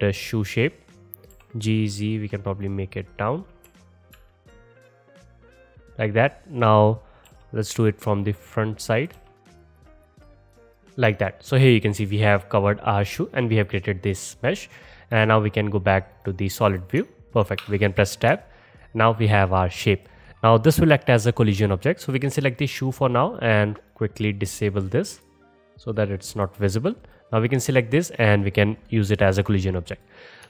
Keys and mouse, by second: 1.4 g, 3.4-6.2 middle drag, 3.7 KP_1, 4.2 KP_3, 6.2-8.4 drag, 7.3 g, 8.4 middle click, 8.7 click, 9.2-10.5 typing, 9.4 click, 9.6 click, 9.8 click, 10.1 click, 15.2-19.6 drag, 17.6 Tab, 20.4-22.1 middle drag, 22.1-23.4 drag, 23.4 middle click, 23.8 click, 23.9 middle click, 24.1 click, 24.2 middle click, 24.4 click, 24.5 middle click, 25.1 click, 25.3-26.4 middle drag, 26.4 click, 26.4 middle click, 27.1-30.4 drag.